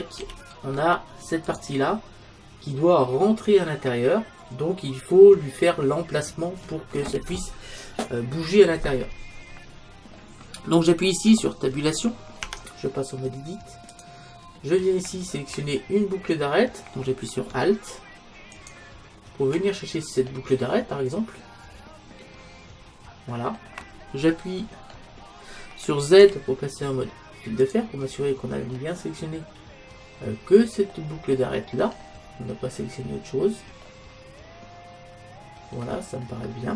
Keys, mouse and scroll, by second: 1.6-3.3 drag, 9.8-12.5 middle drag, 12.5 Tab, 14.9-15.9 drag, 18.6-20.5 right drag, 20.8-22.6 middle drag, 24.7-30.5 middle drag, 26.2 z, 31.3-32.1 scroll up 1, 32.1-35.7 middle drag, 36.4-36.7 middle drag.